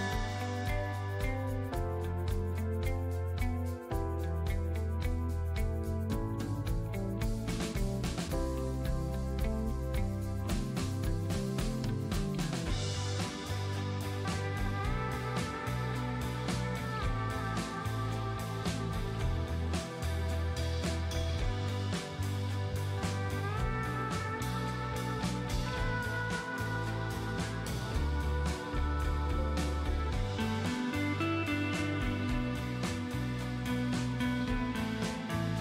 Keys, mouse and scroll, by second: 1.3 click, 5.9 space, 6.2 alt+click, 7.3 space, 7.5 alt+click, 8.6 click, 12.4 space, 12.6-14.0 ctrl+drag, 14.0 scroll up 1, 15.0 click, 19.3 space, 19.4 right click, 19.7 click, 20.4 space, 20.5-22.8 ctrl+drag, 28.3 space, 29.3 click.